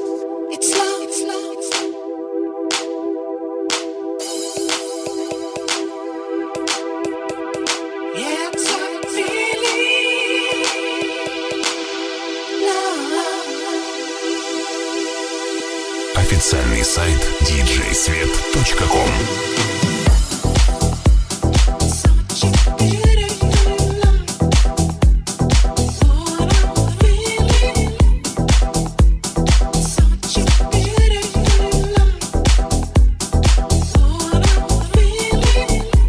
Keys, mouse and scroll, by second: 0.0-8.4 middle drag, 8.4-11.9 alt+drag, 8.5 alt+z, 9.2 alt+z, 10.3 g, 11.9-13.4 middle drag, 11.9 r, 13.4-18.1 drag, 18.1-28.5 middle drag, 23.8 KP_1, 25.6 r, 28.5-36.0 middle drag, 32.7 g.